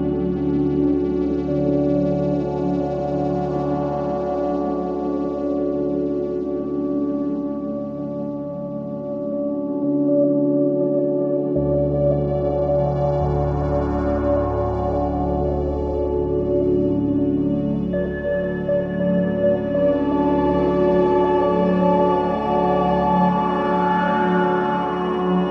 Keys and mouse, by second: 0.0 click, 2.9 click, 4.4-7.1 drag, 12.2 click, 13.7-14.4 drag, 15.2-15.6 drag, 16.1 click, 17.4 click, 18.4 alt+shift+click, 21.6-22.7 alt+shift+drag, 23.1 ctrl+alt+click, 24.2 ctrl+alt+click, 24.7 ctrl+alt+shift+click, 25.2 ctrl+alt+click.